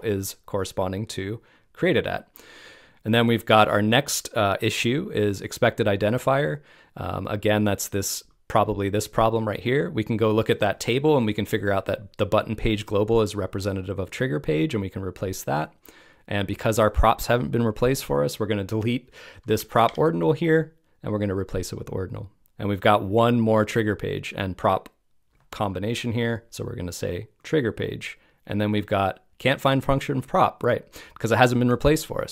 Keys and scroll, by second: 19.8 BackSpace.